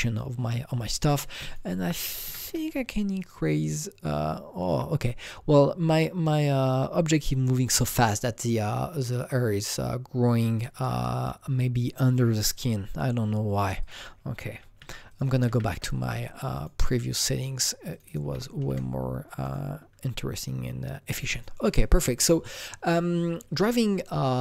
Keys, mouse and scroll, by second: 1.3-2.4 drag, 2.2 KP_6, 2.4 KP_Enter, 3.2 click, 8.1 KP_Enter, 8.1 click, 13.8 click, 13.9 double click, 14.4 KP_1, 14.8 KP_4, 15.1 click, 15.2 double click, 15.4 KP_4, 15.7 KP_Enter, 17.9 click, 18.0 double click, 18.2 KP_3, 18.7 Return, 19.4 click, 21.3 click.